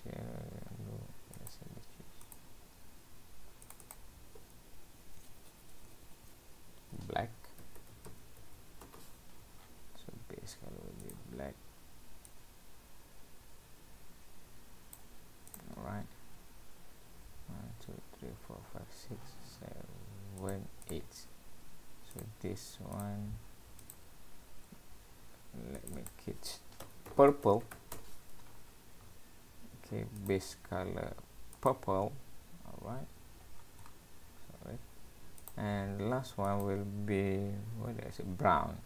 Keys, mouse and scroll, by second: 1.4 click, 2.3 click, 3.7 click, 3.8 click, 4.0 click, 9.6-10.3 scroll down 7, 11.0 click, 15.5 click, 15.8-17.8 scroll up 10, 20.4 click, 20.8 click, 22.2 click, 23.0 click, 23.8 click, 24.8-25.2 scroll down 2, 25.8 click, 26.5 click, 28.7-29.7 scroll down 7, 30.2 click, 33.0-33.6 scroll up 5, 33.6-34.2 scroll down 9, 34.3-35.2 scroll up 2, 35.2 scroll up 2, 35.4 click, 36.5 click.